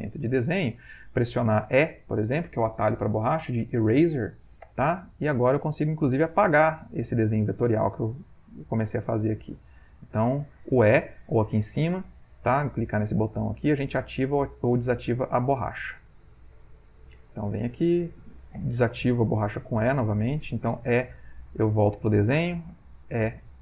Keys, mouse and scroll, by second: 1.8 shift+click, 4.9 e, 5.2-11.2 drag, 13.0 click, 13.6 click, 14.2-17.8 drag, 18.7 e, 19.5-20.8 drag, 21.4-22.8 drag, 21.4 e, 23.4-23.6 drag.